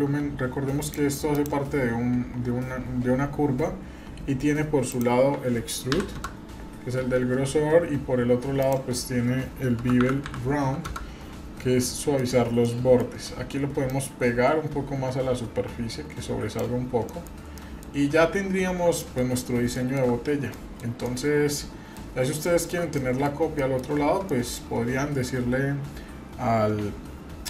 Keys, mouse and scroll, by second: 0.8 click, 1.3 click, 4.0-4.3 scroll down 1, 4.9-6.7 drag, 7.8-8.6 scroll down 2, 8.6-11.2 drag, 11.9-12.3 middle drag, 12.3 scroll up 1, 12.6-13.0 middle drag, 13.9-16.5 drag, 16.8-18.0 scroll down 6, 17.1 middle click, 17.5 middle click, 19.0 shift+middle click, 19.3-19.7 scroll up 2, 19.7 shift+middle click, 20.5 middle click, 21.0-21.9 middle drag, 22.4-22.7 shift+middle drag, 23.0 middle click, 23.2-23.6 scroll down 2, 23.6 middle click, 24.0 scroll up 1, 24.3-24.6 shift+middle drag.